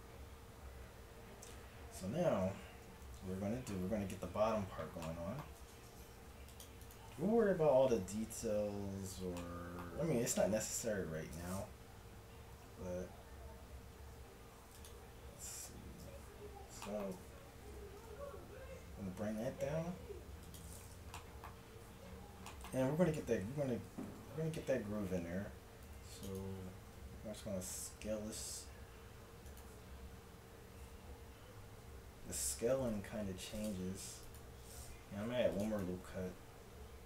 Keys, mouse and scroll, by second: 0.1 click, 1.6 Tab, 2.5 Tab, 5.6 ctrl+Tab, 12.7 e, 15.7 KP_1, 18.0 g, 25.9 ctrl+r, 26.9 s, 31.8 s, 32.9 g, 34.3-36.0 drag, 35.3 ctrl+r, 36.3 s.